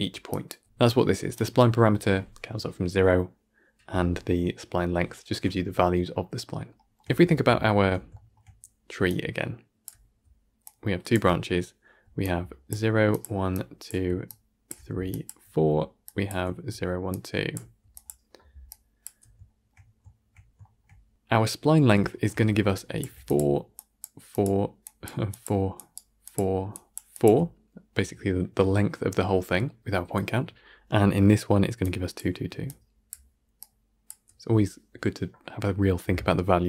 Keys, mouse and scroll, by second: 0.6-9.0 right drag, 9.0-25.8 drag, 25.8 d, 26.1-36.6 drag.